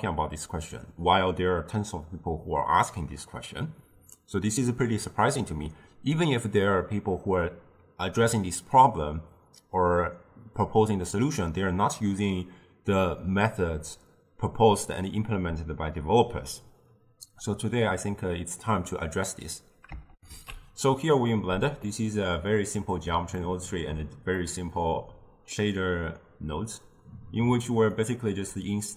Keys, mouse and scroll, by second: 20.2 ctrl+alt+shift+q, 21.9-27.5 middle drag, 28.0 click.